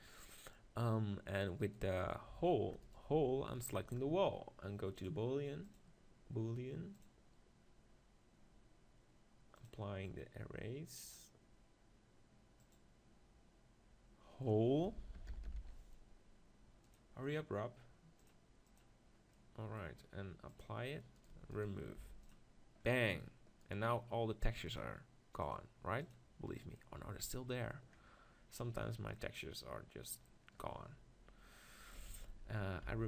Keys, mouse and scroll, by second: 0.1-1.6 middle drag, 1.6 click, 6.0-7.5 drag, 9.7 click, 14.8-17.0 drag, 18.8-20.0 drag, 20.0 middle click, 20.6-22.9 drag, 21.2-22.3 right drag, 22.0 x, 22.9-24.2 right drag, 24.7 click, 25.7-27.3 drag, 26.8-29.4 middle drag, 32.3 ctrl+z, 32.9 ctrl+z.